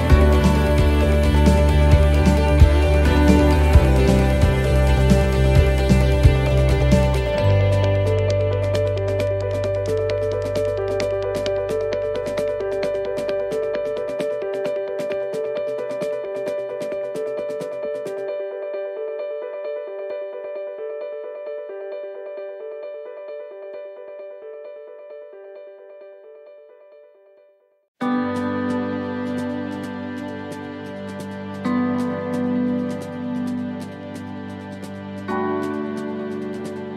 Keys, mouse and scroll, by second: 1.9 r, 5.2 click, 7.4 scroll down 2, 7.7 middle click, 8.6 middle click, 9.7 a, 10.7 shift+d, 12.3 r, 14.5 click, 17.5 middle click, 18.0 shift+middle click, 19.2 a, 27.2 click, 29.4 middle click, 29.7 scroll down 3, 30.1 middle click, 32.0 shift+d, 34.5 r.